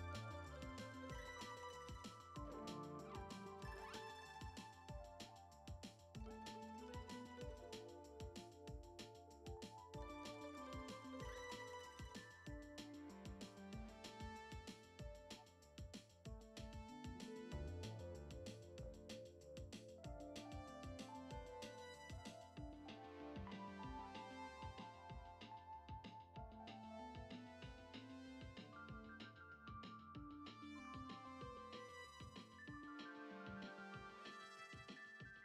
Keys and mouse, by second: 0.0 shift+middle click, 0.4 ctrl+Tab, 0.7 click, 0.9 Tab, 1.1 a, 1.5 u, 2.5 a, 2.7 r, 4.7 n, 6.0 F6, 6.6 click, 7.0-7.4 drag, 7.4 Tab, 7.7 shift+middle click, 8.1 click, 8.3 shift+middle drag, 9.1 alt+shift+click, 10.1 alt+shift+click, 10.9 alt+shift+click, 11.6-12.5 alt+shift+drag, 12.6 alt+shift+drag, 13.2 ctrl+z, 13.7 alt+shift+click, 14.0 alt+shift+drag, 14.3 shift+click, 15.0-15.4 drag, 15.8 ctrl+Tab, 16.5-17.2 drag, 19.3 shift+middle click, 20.0 click, 20.9 click, 22.1 click, 22.3 Tab, 22.6 shift+middle click, 23.8 click, 24.1 alt+shift+click, 24.6-26.5 alt+shift+drag, 26.6 shift+click, 27.2-28.7 drag, 28.9 click, 29.4 ctrl+Tab, 31.1 shift+middle click, 31.5 shift+middle click, 32.5 click, 33.1 middle click, 33.6-35.4 drag.